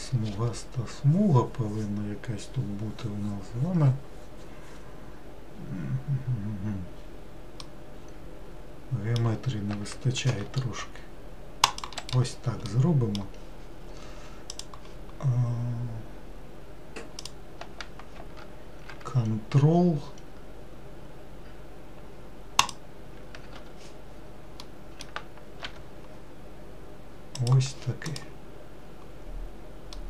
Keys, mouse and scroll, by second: 10.4 ctrl+r, 12.9-14.7 middle drag, 14.7-17.4 drag, 22.8 ctrl+click, 25.8 g, 28.3 click.